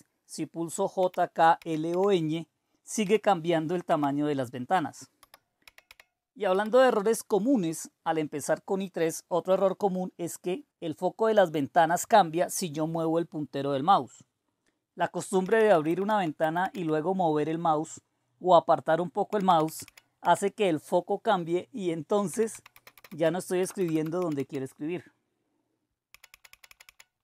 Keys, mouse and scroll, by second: 1.0-1.9 typing, 3.0-7.0 typing, 15.1-17.2 typing, 19.3-20.2 typing, 22.3-24.3 typing, 26.1-26.8 typing.